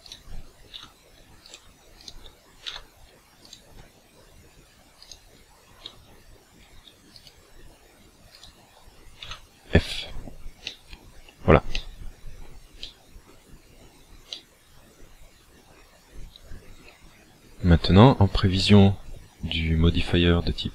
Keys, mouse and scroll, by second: 0.1 shift+right click, 0.8 f, 1.5 right click, 2.0 right click, 2.8 f, 3.4 right click, 5.0 shift+right click, 6.4 scroll up 2, 7.2 right click, 8.4 shift+right click, 9.3 f, 10.2 scroll down 4, 10.8 middle click, 11.8 middle click, 12.9 middle click, 13.5 scroll down 3, 14.4 middle click, 18.6 middle click.